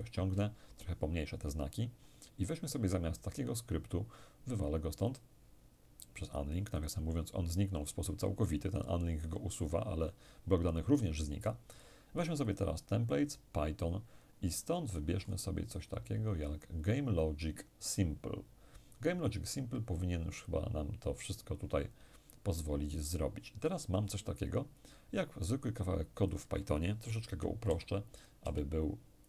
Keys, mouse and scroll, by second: 0.1-1.3 ctrl+scroll down 2, 1.3-2.0 ctrl+scroll down 1, 4.2 click, 6.4 click, 11.4 click, 14.1-15.8 scroll up 1, 15.8-16.9 scroll up 1, 20.0 click, 22.2-23.6 scroll down 1, 24.3-25.3 scroll up 1, 25.3 scroll up 1, 25.9 click, 26.9 Delete, 27.3 Delete, 27.8 click, 28.0 Delete, 29.1 click.